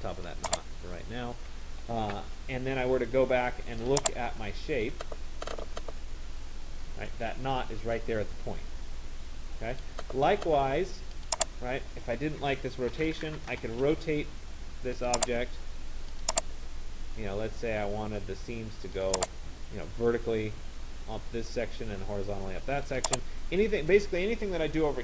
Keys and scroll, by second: 13.3 Return.